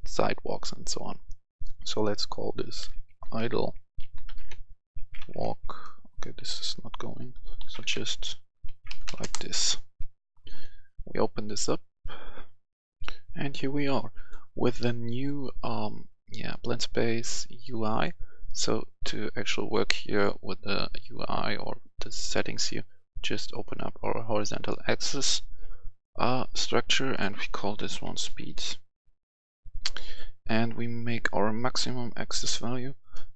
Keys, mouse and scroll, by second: 2.8-3.3 typing, 4.9-5.8 typing, 7.6-9.0 typing, 9.2 Return, 10.3 click, 12.9 F10, 13.8 click, 15.9 click, 20.7 click, 27.8-28.3 typing, 28.5 Return, 30.0 click.